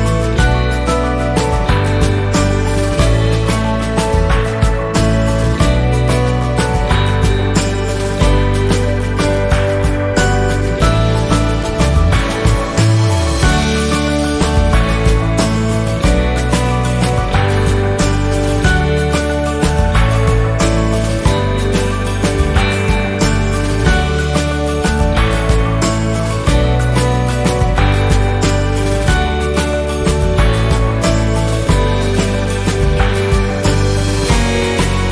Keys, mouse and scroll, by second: 0.9 Right, 4.3 shift+Right, 4.3-8.3 shift+drag, 8.3 ctrl+z, 8.9 ctrl+a, 9.9-14.3 drag, 14.3 shift+scroll down 1, 15.1 z, 15.6-17.3 drag, 18.3 F10, 18.9 click, 20.1 Left, 23.9 click, 23.9-27.1 drag, 27.1-31.1 drag, 31.1 F6, 31.8-34.2 drag.